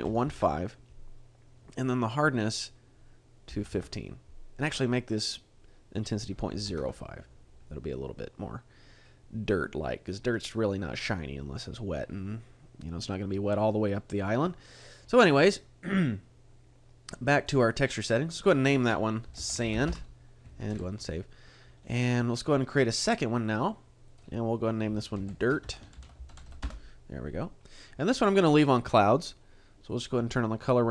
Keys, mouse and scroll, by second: 17.5 click, 18.4 click, 20.7 ctrl+s, 21.8-22.3 scroll up 1, 22.8 click, 24.1 click, 29.9 click.